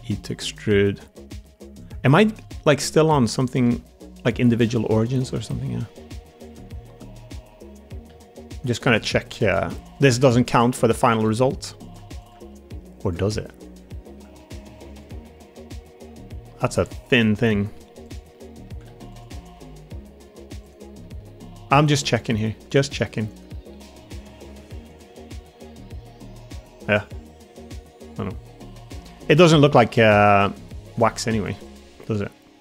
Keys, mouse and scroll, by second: 0.7 g, 4.7 middle click, 5.2 g, 6.6 middle click, 8.0 2, 8.4 click, 8.7 g, 9.8 click, 10.4 click, 10.8 1, 11.0 click, 11.2 g, 12.2 click, 12.3 g, 13.1 click, 13.2 middle click, 13.8 shift+middle click, 14.3 middle click, 14.6 Tab, 15.1-16.3 middle drag, 16.4 Tab, 16.7 3, 17.0 click, 17.2 middle click, 18.0 click, 18.2 middle click, 18.8 alt+z, 19.3 middle click, 19.5 g, 20.9 middle click, 21.8 click, 22.2 g, 23.4 middle click, 24.5 Tab, 25.3-28.9 middle drag, 29.1 Tab, 29.3 middle click, 30.1 middle click, 30.7 click, 31.0 middle click, 31.6 click, 31.8 middle click, 32.2 g.